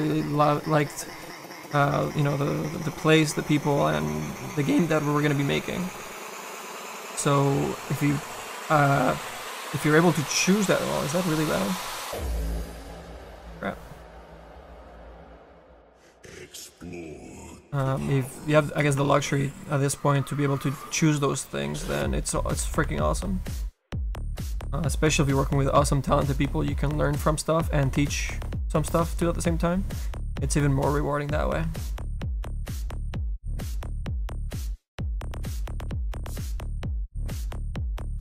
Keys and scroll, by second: 16.3 super+Down, 31.7 s.